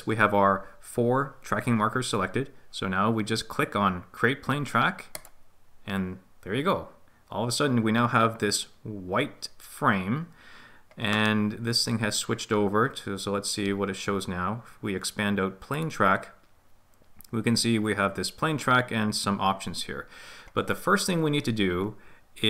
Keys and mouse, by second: 5.2 click, 15.8 click.